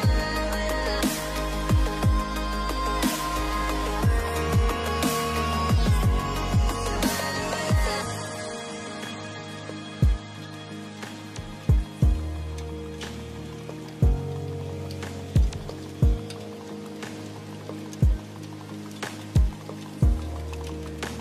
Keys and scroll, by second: 5.4 space, 7.0 space, 10.3 space, 11.7 space.